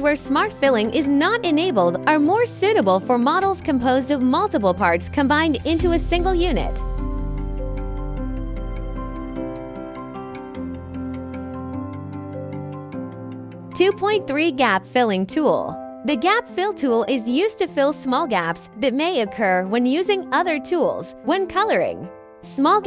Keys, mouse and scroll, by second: 0.5 click, 5.8 scroll, 6.6 click, 7.2 scroll, 7.3 click, 8.0 click, 9.1 click, 9.6 Delete, 10.0 click, 10.9 click, 12.5 scroll, 12.8 click, 12.9 click, 13.1-13.6 scroll, 13.2 click, 13.4 click, 13.6 click, 17.0 click, 22.7 scroll.